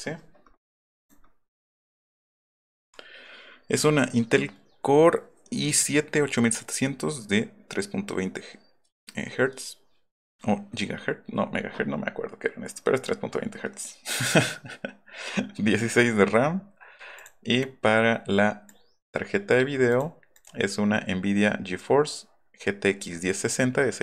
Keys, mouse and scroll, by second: 1.0 click, 1.7 click, 17.2 click.